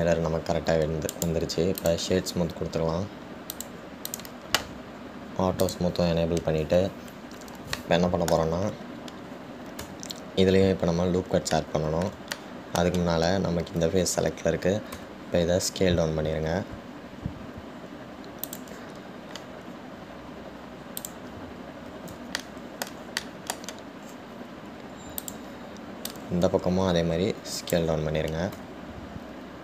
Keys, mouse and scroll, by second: 0.0-1.3 drag, 4.7 click, 5.3 click, 6.8 click, 8.9-9.9 middle drag, 9.9 scroll up 2, 11.0 Tab, 12.8-16.2 middle drag, 16.2 s, 22.2 click, 23.6-26.4 shift+middle drag, 26.4 click.